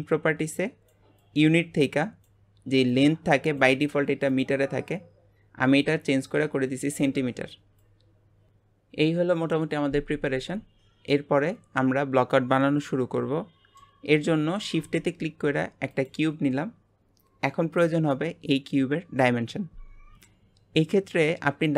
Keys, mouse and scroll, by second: 4.3-7.3 drag, 11.1-14.2 middle drag, 14.5 shift+a.